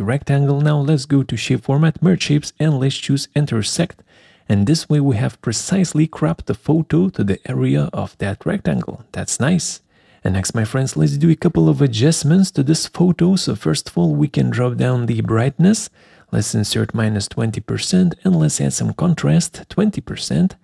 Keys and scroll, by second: 11.3 alt+4.